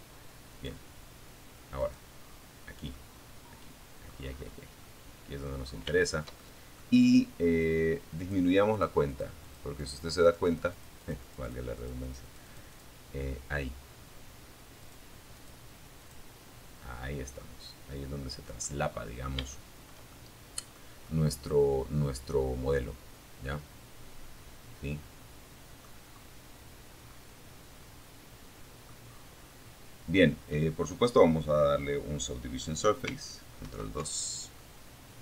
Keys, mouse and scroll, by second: 0.0 right click, 1.1-2.4 middle drag, 2.5-3.0 scroll up 2, 3.0 middle click, 3.8-4.2 scroll down 3, 4.2 shift+middle click, 5.1 shift+click, 6.4 click, 6.9 click, 7.3 click, 7.8 click, 8.0-9.9 drag, 10.0-11.2 drag, 13.0 click, 13.6 click, 14.2 click, 15.2-15.5 scroll down 1, 15.6-17.0 middle drag, 17.1-17.4 scroll up 2, 17.7 shift+middle click, 17.8 shift+scroll up 2, 18.3 shift+middle click, 19.2-24.2 middle drag, 24.2-24.8 scroll up 2, 25.2-27.2 middle drag, 27.3-27.8 scroll down 2, 31.8 ctrl+2, 32.8-35.2 middle drag.